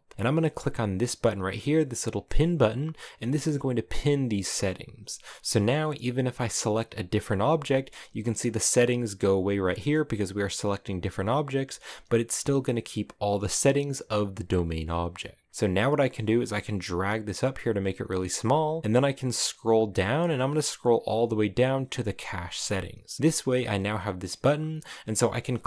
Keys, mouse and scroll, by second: 4.7-6.3 scroll down 13, 6.3 right click, 9.4 right click, 9.7 right click, 10.1 right click, 10.5 right click, 25.1 right click, 25.5 right click.